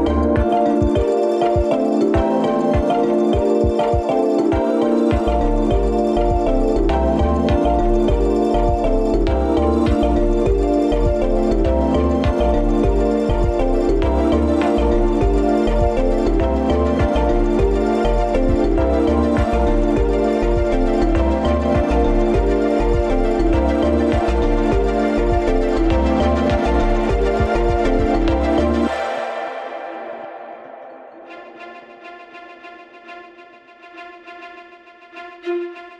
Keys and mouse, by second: 3.5-7.8 drag, 8.6-12.9 drag, 15.1 Tab, 16.4 middle click, 17.4 s, 19.5 r, 22.0 `, 27.2 g, 31.3 alt+z, 32.2 g.